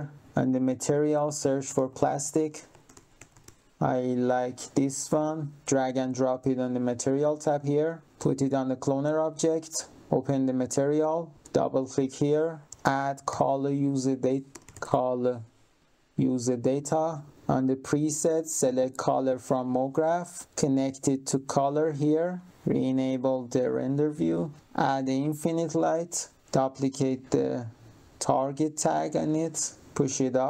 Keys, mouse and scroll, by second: 0.5 click, 1.4-3.9 typing, 5.0 click, 7.4 click, 8.0 click, 9.9 click, 10.5 click, 11.4 click, 12.4-15.3 typing, 16.2 click, 17.3 click, 19.7 click, 20.4 click, 22.2 click, 23.6 click, 24.6 click, 26.0 click, 28.7 ctrl+click, 29.8 click.